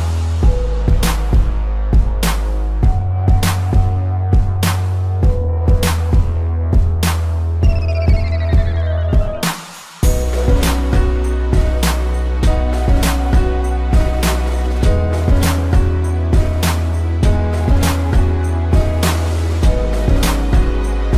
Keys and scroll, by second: 1.8 space, 2.5 z, 3.2 p, 9.1 space, 10.4 space, 11.9 space, 13.6 space, 18.2 ctrl+z.